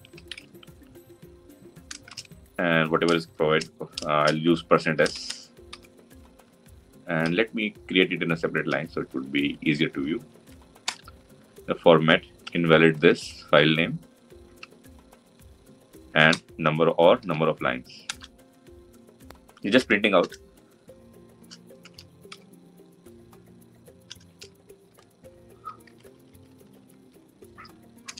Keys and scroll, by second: 17.9 Return.